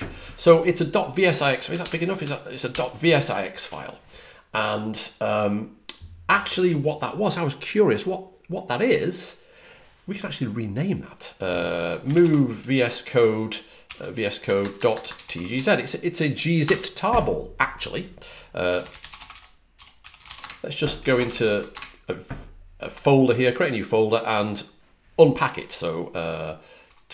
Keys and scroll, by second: 2.5 super+=, 11.7-15.9 typing, 16.5 Return, 18.3-21.7 typing, 26.7-27.1 typing.